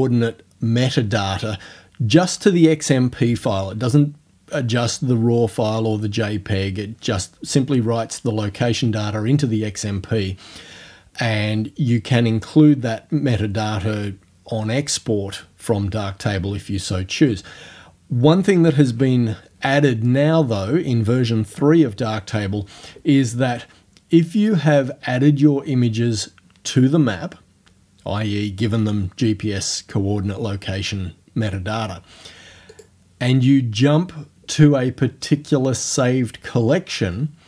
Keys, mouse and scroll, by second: 18.9 ctrl+f, 32.7 click.